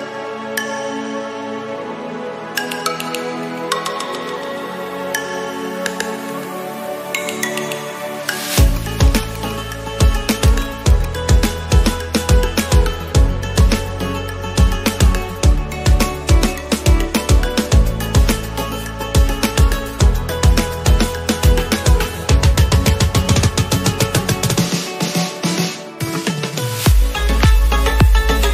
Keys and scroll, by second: 6.1 Return.